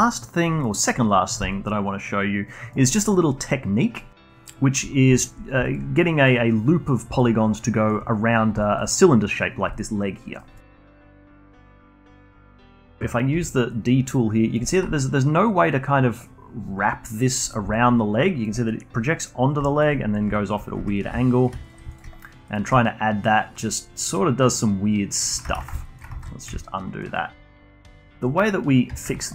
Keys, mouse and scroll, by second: 0.0-0.6 alt+drag, 0.6-1.1 alt+middle drag, 1.1-1.5 scroll up 1, 1.5-2.9 alt+drag, 2.9 alt+middle click, 3.1-4.5 alt+drag, 4.5 scroll up 1, 4.8-5.7 alt+drag, 5.7 scroll down 1, 5.9-11.3 alt+drag, 11.3 alt+middle click, 11.5-12.4 alt+drag, 12.4-13.3 alt+middle drag, 13.3 d, 13.7-20.8 drag, 20.8 2, 20.9 click, 21.2 shift+click, 21.4 shift+click, 21.6 alt+click, 21.9-22.8 shift+right drag, 22.8-26.1 alt+drag, 26.1 ctrl+z, 26.6-27.2 alt+drag, 27.2 scroll up 1, 27.5-29.0 alt+drag, 29.2 alt+click.